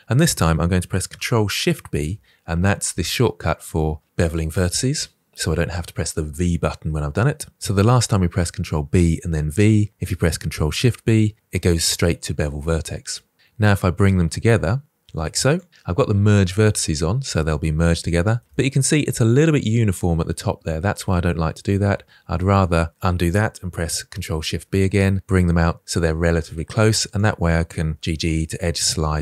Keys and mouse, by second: 1.8 ctrl+shift+b, 17.2 middle click, 18.4 shift+middle click, 18.8-21.0 middle drag, 21.8 ctrl+z, 24.2 ctrl+shift+b, 26.0 middle click, 26.5 click, 27.2 g, 27.2 g, 28.0 g, 28.0 g, 28.4 middle click.